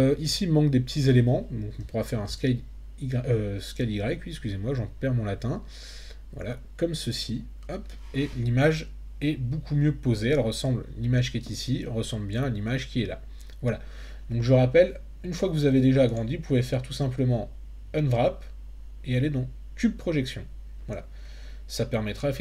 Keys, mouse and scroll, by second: 1.8 s, 2.3 y, 7.0 click, 16.2-21.0 drag.